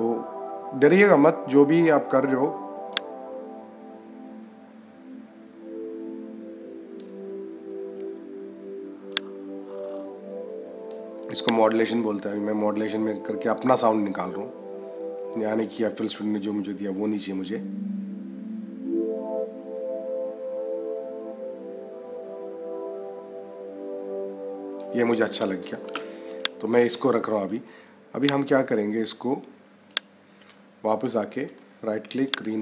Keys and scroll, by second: 25.7 -.